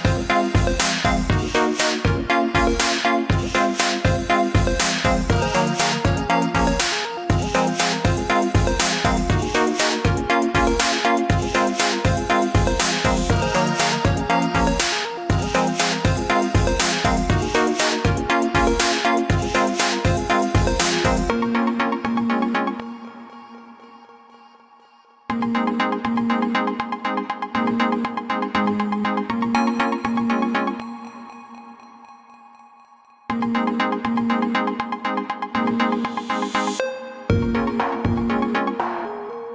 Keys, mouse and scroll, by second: 1.3 click, 6.0 click, 12.3 click, 13.4 shift+click, 15.4 click, 25.2 click, 30.5 click, 34.1 click, 36.8 click.